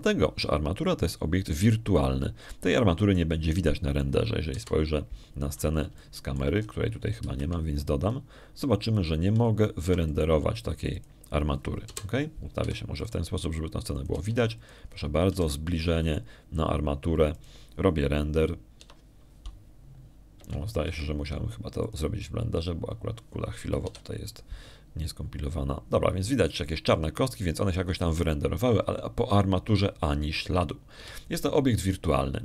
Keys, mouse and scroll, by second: 3.9 middle click, 4.7 middle click, 5.4 middle click, 6.4 0, 7.9 shift+middle click, 9.1 shift+a, 10.7 click, 11.7 g, 11.9 middle click, 12.7 click, 13.7 0, 14.5 g, 14.9 click, 15.2 middle click, 15.8 click, 16.0 g, 16.5 click, 16.7 scroll down 1, 17.2 g, 17.9 click, 19.2 click, 20.7 F12, 22.3 Escape, 22.7 Escape, 23.7 click, 24.4 click, 25.7 F12, 27.0-27.5 scroll down 1, 28.9 scroll up 1.